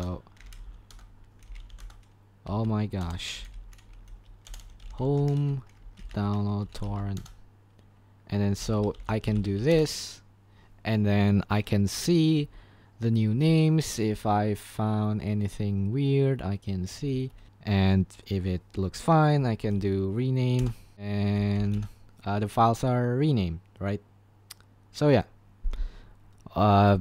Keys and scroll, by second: 0.0-9.9 typing, 12.4 shift+Page_Up, 13.3 shift+Page_Up, 14.1 shift+Page_Down, 17.0 shift+Page_Up, 17.3 shift+Page_Down, 17.4 shift+Page_Down, 17.5 shift+Page_Down, 19.6 y, 20.6 Return, 20.7-22.4 typing.